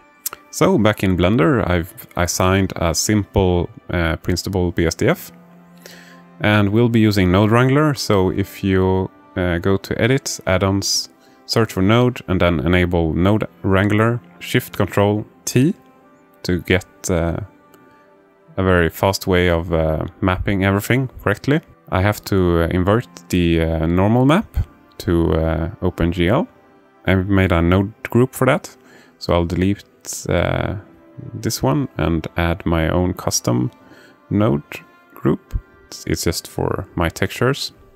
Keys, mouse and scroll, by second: 1.9-3.8 alt+middle drag, 6.4 click, 7.9-8.7 drag, 13.6 click, 14.1 click, 15.9 ctrl+shift+t, 27.0 alt+shift+middle click, 27.9-28.8 drag, 29.5-30.4 drag, 31.0 click, 32.0 Delete, 33.0 shift+a, 37.0-37.9 drag.